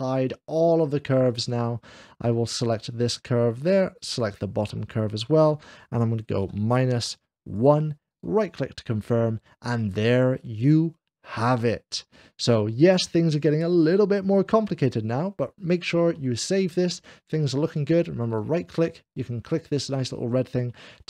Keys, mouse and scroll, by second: 0.6 click, 2.5 click, 3.9 shift+click, 5.1 click, 7.1 h, 8.0-9.1 right drag, 9.1-10.2 middle drag, 10.6-12.5 middle drag, 12.9 click, 12.9 scroll down 1, 13.7-14.7 middle drag, 18.1-19.2 right drag, 19.3 click, 20.4 middle click.